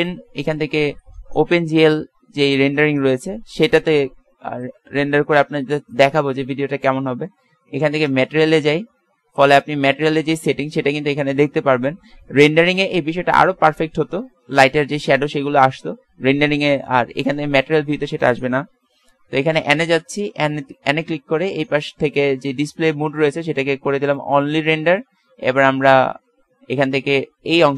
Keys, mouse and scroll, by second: 6.0-7.6 drag, 10.5 middle click, 12.9 middle click, 17.2 click, 19.0 n.